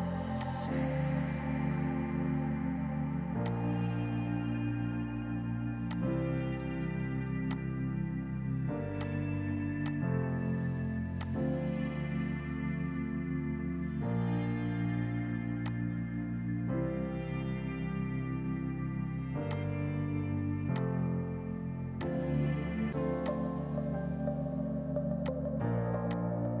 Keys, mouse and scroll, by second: 2.0 right click, 3.4 click, 5.8 click, 6.8 b, 7.4 click, 8.9 click, 9.4 r, 9.8 click, 15.2 F3, 15.6 click, 15.8 right click, 19.4 right click, 19.4 click, 22.0 click, 23.1 click, 26.0 click.